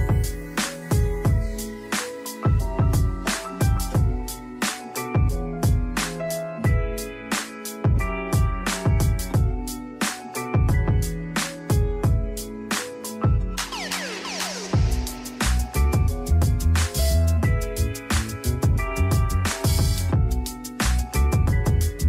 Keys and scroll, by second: 0.7-1.8 typing, 5.1 shift+Right, 11.1 z, 12.6 r, 14.1 d, 15.2-17.3 typing, 18.4-20.6 typing.